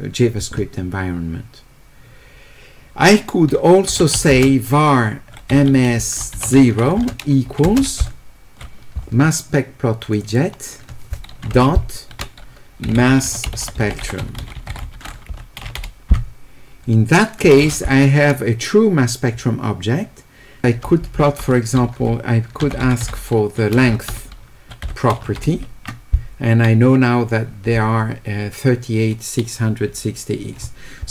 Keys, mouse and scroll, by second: 4.0 q, 4.3 space, 5.5 s, 7.0 space, 10.2 click, 10.3 click, 12.7-14.4 typing, 22.6 e.